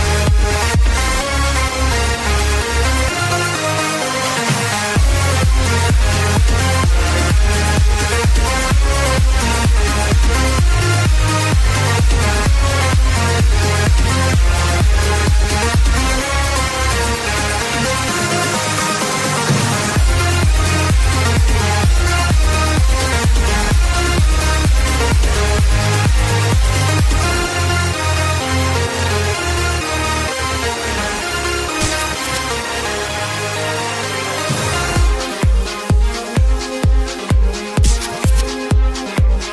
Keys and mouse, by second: 5.0 click, 7.2 click, 12.7 click, 13.3 space, 15.7 click, 15.7 space, 26.3 click, 27.4 KP_2, 27.5 KP_0, 27.7 Return, 30.5 Return, 30.5 click, 30.5 KP_3, 30.5 KP_0, 30.5 KP_2, 33.0 Return, 33.0 click, 33.0 KP_0, 33.0 KP_3, 33.9 Return, 33.9 click, 33.9 KP_0, 33.9 KP_3, 36.1 click, 36.7 ctrl+y, 36.7 click, 38.0 click, 38.8 ctrl+y, 38.8 click, 39.1 Return.